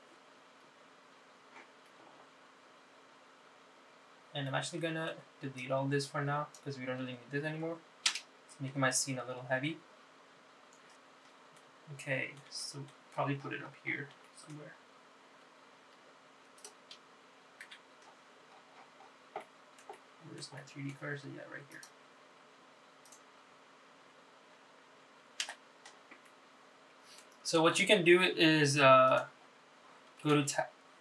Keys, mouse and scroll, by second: 3.7-4.3 scroll down 1, 4.3 scroll down 1, 5.1-5.6 scroll down 4, 5.6 middle click, 6.7-8.2 drag, 11.0 middle click, 12.7 middle click, 13.7 shift+middle click, 14.3-15.4 scroll up 8, 15.4 shift+middle click, 17.7 click, 18.8 KP_Decimal, 19.6-20.5 scroll up 7, 20.5 middle click, 21.1 shift+middle click, 21.7 shift+middle click, 22.9-24.0 drag, 24.2 click, 26.7 KP_Divide, 27.5 middle click, 28.6-29.5 scroll down 2, 29.5 s, 30.8-31.0 scroll down 2.